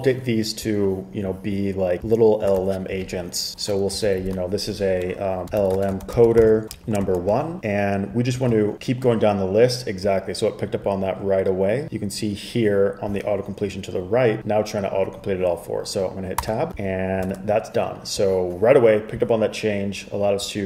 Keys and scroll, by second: 2.6 super+Tab, 4.2 alt+shift+Left, 4.3 alt+shift+Left, 5.3-7.5 typing, 8.5 super+s, 16.5 Tab, 17.4 super+Tab.